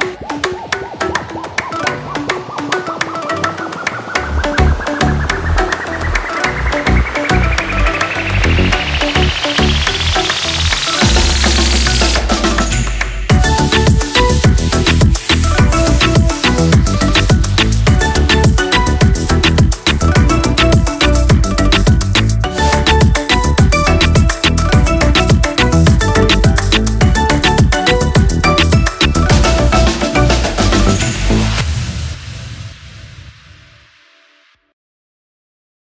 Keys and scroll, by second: 2.9 l, 8.1 Return, 9.6 1, 24.6 ctrl+-, 33.1 ctrl+=, 35.3 ctrl+-.